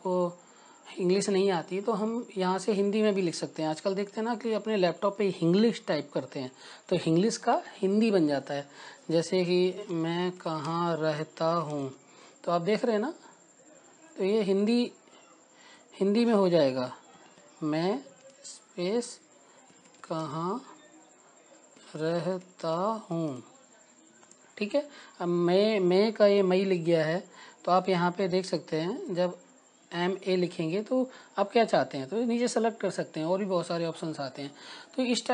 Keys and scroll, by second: 5.8 Right, 7.6 space, 11.7-14.8 typing, 16.5 Return, 18.2 BackSpace, 19.3-20.6 typing, 21.8-26.2 typing, 26.6 Return, 30.2 BackSpace, 31.6-32.8 typing.